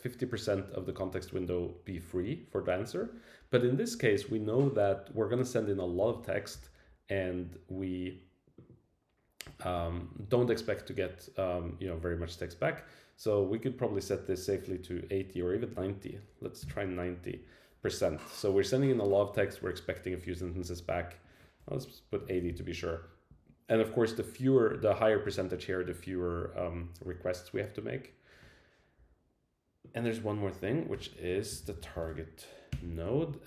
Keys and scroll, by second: 30.9 Return, 32.7 Return.